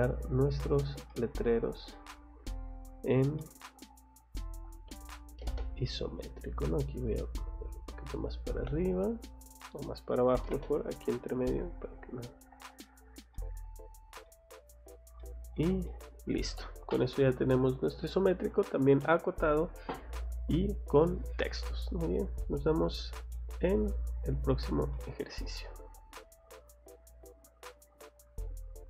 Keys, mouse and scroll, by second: 0.3-0.6 scroll up 1, 0.7 scroll down 1, 1.1 middle click, 1.5 scroll down 1, 1.9 middle click, 3.4 middle click, 3.7 scroll up 1, 4.3 click, 5.3 m, 5.4 space, 5.6 scroll down 2, 6.3 scroll up 2, 6.7 click, 7.5 click, 8.0 scroll down 2, 8.5 scroll up 2, 9.3 click, 10.4 m, 10.5 space, 10.6 scroll down 1, 11.0 click, 11.9 click, 12.3 scroll down 1, 12.8 middle click, 13.3 middle click, 13.9 scroll down 1, 14.2 middle click, 15.2 middle click, 15.8 middle click, 23.3 middle click, 23.7-24.0 scroll down 2, 24.3-24.7 scroll up 2, 24.9 middle click, 28.8 click.